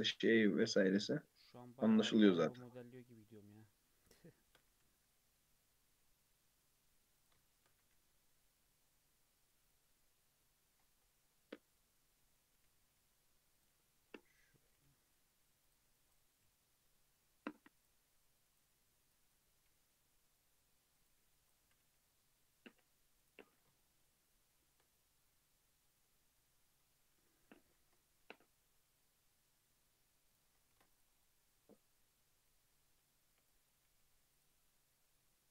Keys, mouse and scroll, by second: 1.9 1, 2.4 click, 3.7 2, 4.3 shift+middle click, 4.6 e, 7.5 shift+middle click, 7.7 e, 12.5 g, 13.9 1, 14.1 drag, 14.7 g, 16.0 click, 16.2 g, 18.1 click, 19.1 click, 19.5 g, 21.3 click, 21.6 g, 23.8-24.9 shift+middle drag, 24.9 click, 25.6 click, 27.1 2, 27.8 ctrl+b, 30.7 ctrl+r, 31.5 click, 32.9 1, 33.5 click, 33.9 x, 35.4-35.5 shift+middle drag.